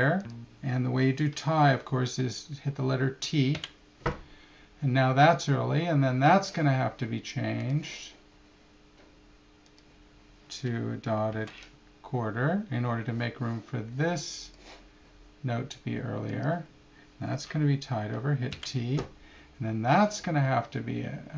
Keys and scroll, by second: 0.2 4.